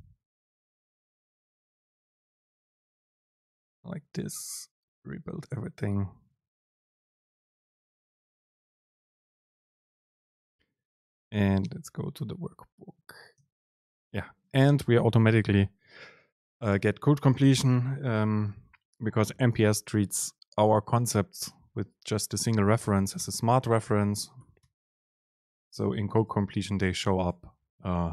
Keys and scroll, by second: 13.4 super+space, 23.9 super+space, 26.3 Return, 26.4 super+space.